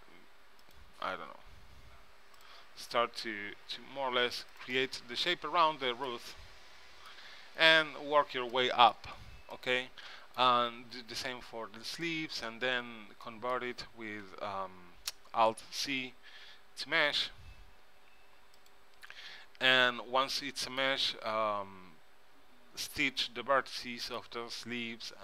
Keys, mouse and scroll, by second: 1.3 e, 3.7 s, 4.9 middle click, 9.4 middle click, 9.8-11.4 middle drag, 12.2-14.4 middle drag, 14.4 Tab, 15.6 alt+c, 20.1 Tab, 20.5-22.2 middle drag, 23.9-25.2 middle drag.